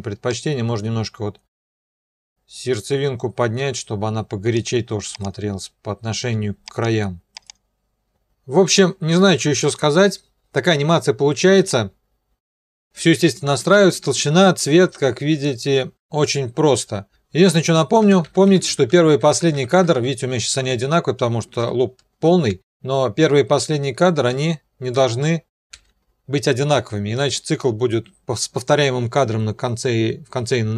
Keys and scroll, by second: 9.6 0, 15.3 0, 15.9 shift+Home, 16.7 shift+End, 18.0 shift+Home, 18.2 shift+End, 18.5 shift+Home, 18.7 shift+End, 18.9 shift+Home, 19.1 shift+End, 19.3 shift+Home, 19.5 shift+End, 19.8 shift+Home, 21.6 shift+End, 23.7 Page_Up, 25.7 n.